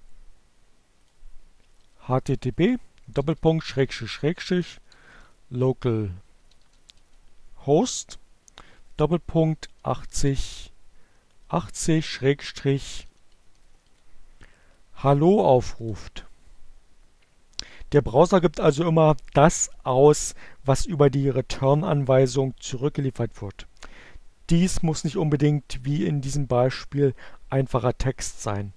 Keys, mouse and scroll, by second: 0.5-3.1 typing, 4.1-5.8 typing, 6.8-10.2 typing, 11.3-12.4 typing.